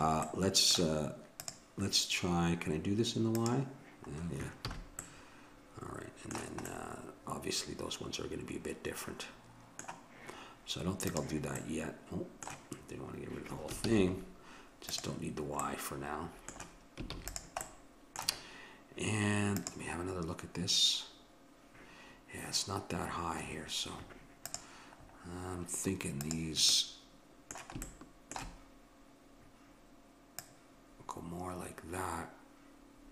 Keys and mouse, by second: 0.3-1.4 middle drag, 1.4-3.3 drag, 4.6 click, 4.6 a, 5.0-7.2 middle drag, 11.1-12.9 drag, 12.9 middle click, 13.9 ctrl+z, 14.9-16.4 drag, 17.2 ctrl+s, 24.5-28.1 drag, 27.9-30.3 middle drag, 30.3-32.2 drag.